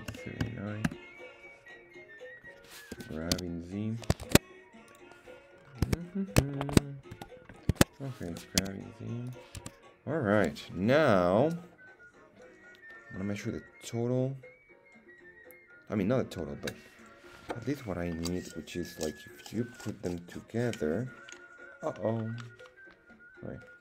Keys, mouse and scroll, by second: 2.9 g, 3.3 z, 4.2 shift+Tab, 4.9 click, 5.5 scroll up 1, 6.0-6.4 scroll down 2, 6.5-7.3 shift+middle drag, 7.1 KP_1, 8.3 g, 8.6 z, 9.3 click, 9.7 Tab.